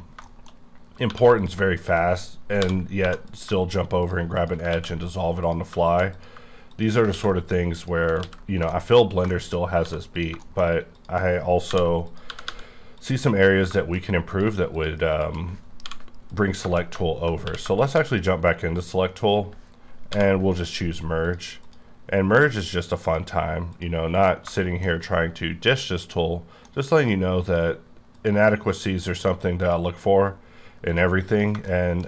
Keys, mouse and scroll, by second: 0.0 scroll down 2, 0.2 shift+middle click, 0.5 scroll up 2, 1.1 1, 1.3 click, 2.6-3.0 typing, 3.2 click, 4.4 shift+click, 4.7 ctrl+x, 5.4 click, 6.1 click, 6.7 click, 7.1 ctrl+x, 7.8 click, 8.2 ctrl+x, 8.7 shift+middle click, 8.9-9.3 shift+scroll down 3, 9.3 shift+middle click, 9.8 1, 10.1 click, 10.5 shift+middle click, 10.9 shift+click, 12.3 g, 12.4 g, 13.0 click, 13.3-13.7 scroll down 2, 13.7 shift+middle click, 14.3 click, 15.1 shift+click, 15.8 m, 16.3 click, 17.4 q, 17.8 shift+click, 18.5 scroll down 3, 20.1 m, 21.2 click, 21.6 click, 22.6 click, 23.1 click, 24.1 click, 24.6 shift+middle click, 27.0 click, 27.4 click, 28.1 click, 28.8 click, 29.2 click, 29.6 click, 30.9 click, 31.3 click, 31.7 middle click.